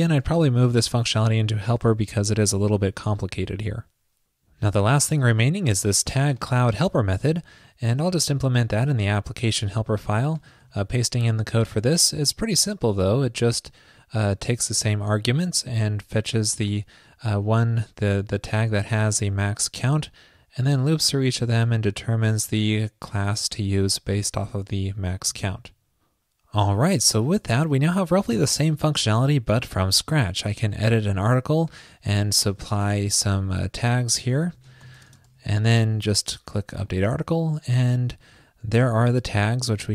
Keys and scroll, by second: 2.6 super+s, 10.7 super+v, 25.5 super+s.